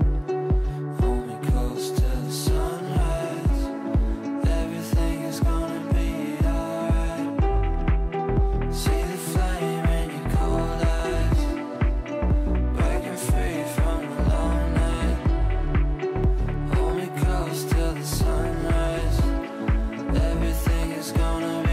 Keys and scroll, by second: 12.3 Delete.